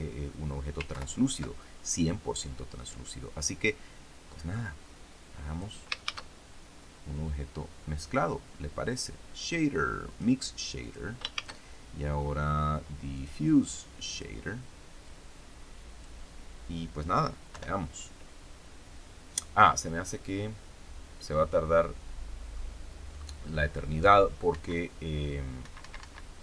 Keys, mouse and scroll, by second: 0.8 ctrl+Left, 4.2-5.7 drag, 5.9 shift+a, 10.0 click, 10.7 click, 11.3 shift+a, 13.1 click, 14.1 click, 14.9-16.1 drag, 17.4 F12, 21.2-22.6 middle drag, 23.0-23.3 scroll up 1, 23.5-23.8 scroll down 1, 24.4 Escape, 25.5 Escape.